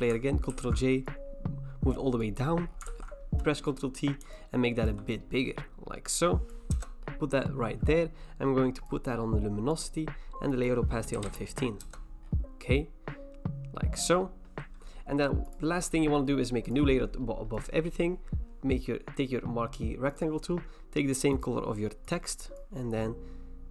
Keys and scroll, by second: 0.5 ctrl+j, 2.9 ctrl+t, 6.7 Return, 11.1-12.3 typing.